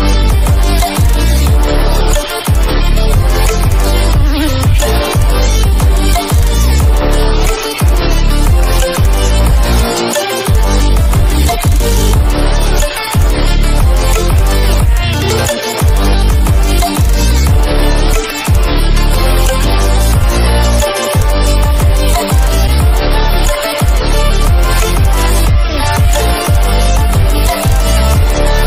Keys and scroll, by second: 4.1 ctrl+-, 17.1 ctrl+=, 18.3 ctrl+-.